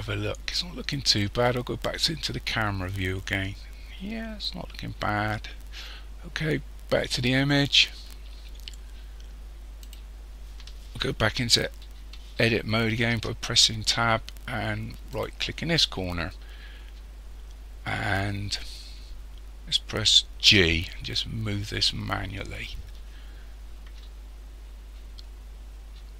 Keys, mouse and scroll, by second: 1.9 click, 7.5 click, 8.8-9.2 scroll down 1, 9.9 right click, 13.2 Tab, 15.2 right click, 20.5 g.